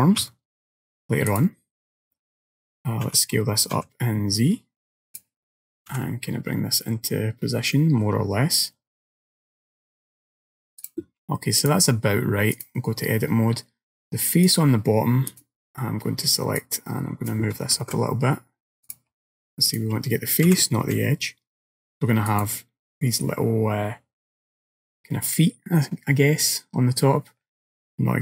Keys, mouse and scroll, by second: 0.3 s, 3.1 s, 6.0 g, 11.7 click, 14.5 click, 15.5 click, 16.6 click, 17.8 ctrl+z, 18.9 click, 19.7 click, 20.5 g.